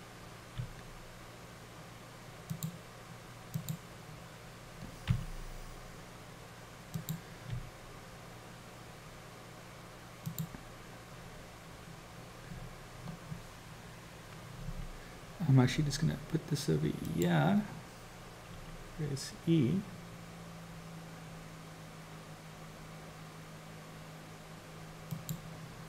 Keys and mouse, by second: 0.6 g, 3.5 click, 5.1 r, 7.5 g, 15.6 g, 18.6 e.